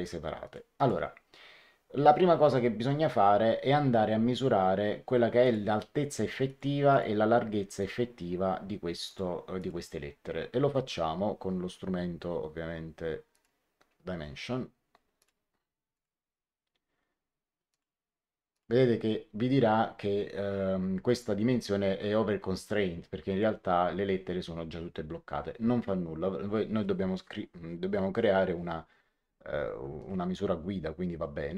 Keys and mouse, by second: 5.3 click, 6.4 click, 9.0 click, 13.3 click, 15.1 click, 17.6 click, 29.9 click.